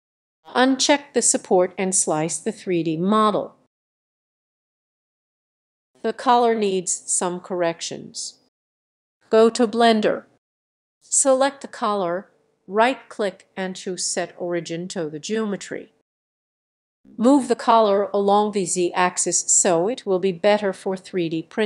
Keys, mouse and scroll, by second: 3.3 click.